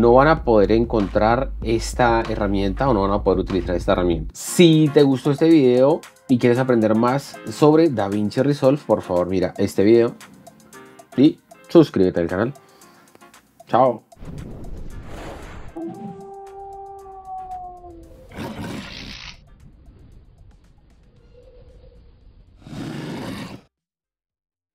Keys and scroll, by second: 0.4 Left.